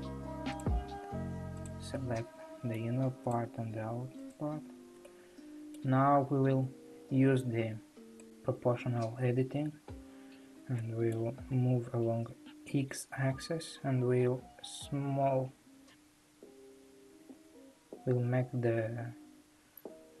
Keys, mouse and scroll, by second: 0.6 click, 1.9 shift+click, 1.9-3.3 middle drag, 3.3 shift+click, 4.3 shift+click, 5.0-6.1 middle drag, 6.1 scroll, 6.2 scroll up 2, 8.2 click, 10.8 middle click, 11.4 g.